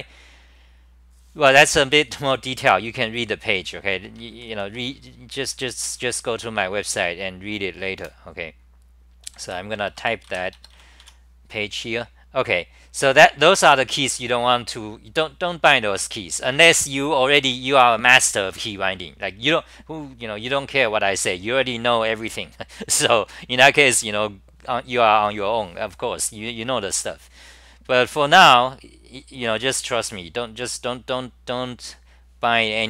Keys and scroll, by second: 8.0 super+w, 9.2 d, 9.8 Return, 9.8 d, 9.9 Return, 10.3 k, 11.0 Home, 12.1-13.5 scroll down 4.